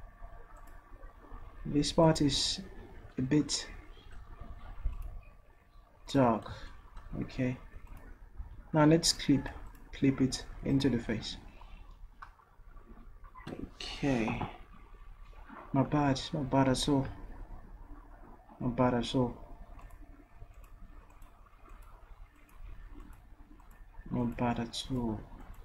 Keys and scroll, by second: 8.4 v.